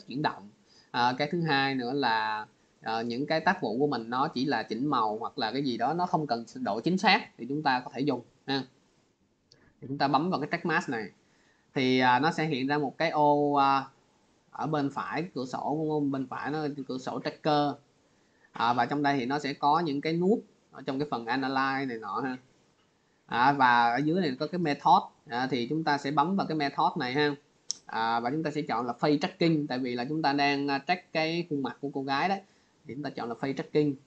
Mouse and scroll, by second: 9.5-16.0 drag, 26.2 click, 28.4-31.3 drag, 33.0 click.